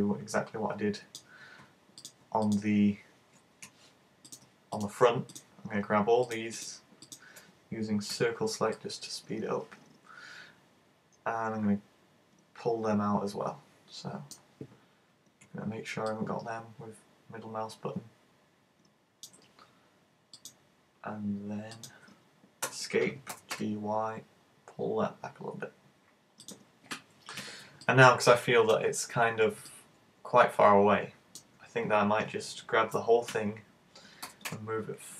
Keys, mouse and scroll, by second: 0.0 middle click, 2.1 right click, 2.5 shift+right click, 4.3 right click, 4.8 shift+right click, 5.4 right click, 6.3 shift+right click, 6.6 shift+right click, 7.1 shift+right click, 8.2 c, 23.4 g, 26.5 click, 27.4 a, 27.9 middle click, 28.9 scroll down 4, 29.3 z, 29.7 middle click, 34.3 g.